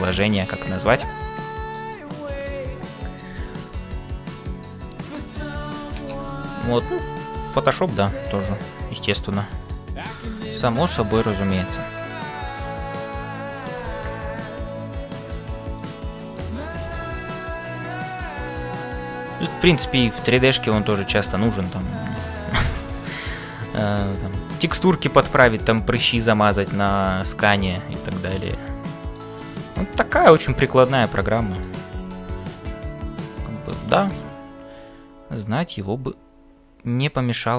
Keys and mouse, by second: 0.6 g, 4.4 middle click, 5.6 shift+middle click, 6.3 ctrl+s, 7.7 middle click, 8.8 middle click, 10.0 middle click, 11.1 c, 12.0 click, 13.9 f, 14.3-15.5 middle drag, 15.7 click, 16.3 middle click, 16.8 f, 17.4-20.5 middle drag, 21.0 click, 21.6-23.2 middle drag, 21.7 f, 24.3-29.3 middle drag, 29.3 click, 29.9 middle click, 31.4 middle click, 34.0-37.5 middle drag.